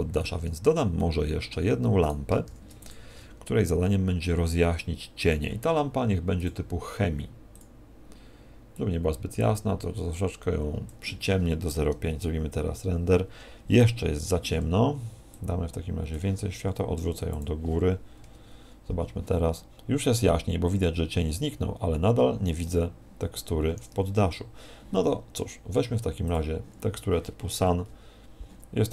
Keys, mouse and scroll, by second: 0.2 middle click, 1.0 middle click, 2.0 right click, 2.4 shift+d, 2.8 click, 3.1 r, 5.2 click, 7.5 click, 8.8 click, 14.2 Escape, 15.3 click, 16.6 r, 17.4 click, 23.3 Escape, 26.2 click, 27.7 KP_1.